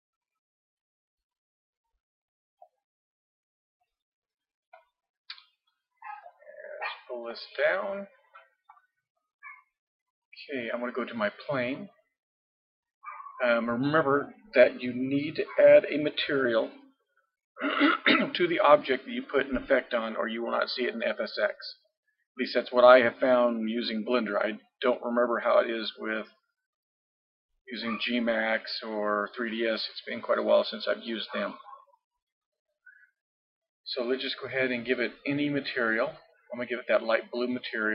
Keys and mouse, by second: 3.4 middle click, 3.4 click, 7.3-9.3 drag, 11.6-13.4 drag, 36.0-37.8 drag.